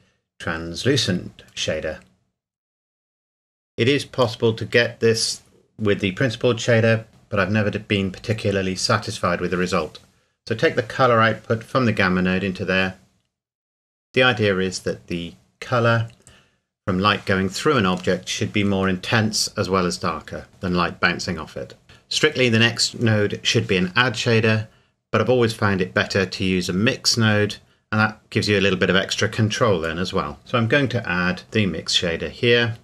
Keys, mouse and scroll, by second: 1.4 click, 4.0-6.3 scroll down 1, 6.6-7.2 scroll up 1, 9.7 click, 11.8 middle click, 21.8 click, 30.4 click, 31.9 click.